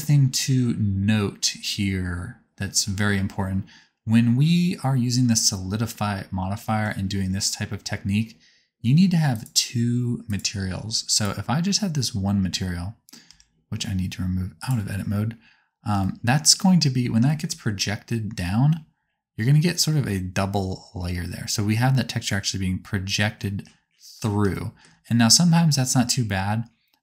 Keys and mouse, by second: 9.3 click, 10.2 click, 11.1-12.5 drag, 13.5 Tab, 25.2-27.0 drag.